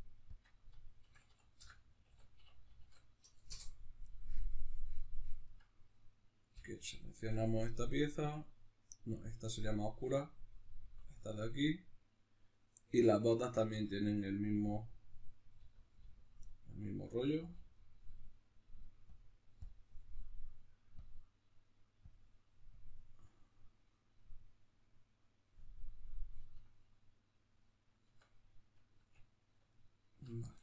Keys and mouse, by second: 3.5 Return, 5.5-6.5 right drag, 6.5 l, 16.5-19.1 middle drag, 17.1 l, 19.1 click, 19.7-21.5 drag, 25.9-30.6 middle drag, 28.2 Tab.